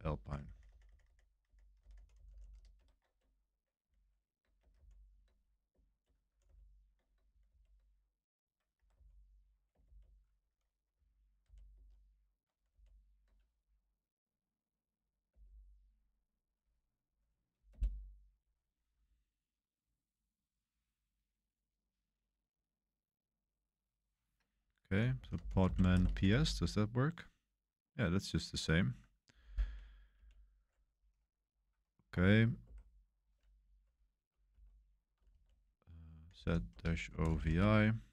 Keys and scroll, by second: 0.0-2.7 typing, 3.9 super+v, 4.4-6.9 typing, 7.4 super+v, 8.7 Escape, 8.9 u, 9.8 shift+v, 11.4 super+c, 11.7 super+1, 12.7 super+v, 15.3 Return, 17.7 Return, 24.9-26.6 typing, 32.1 Escape, 32.6 0, 34.5 0, 35.2 ctrl+c, 35.9-37.8 typing.